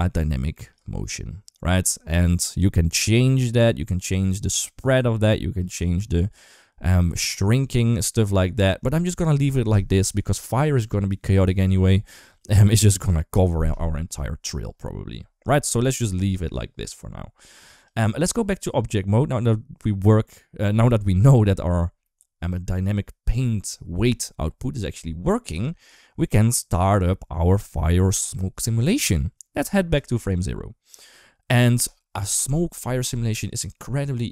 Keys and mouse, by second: 6.2 space, 7.9-8.7 drag, 17.7-19.1 drag, 25.3 click, 29.8 click.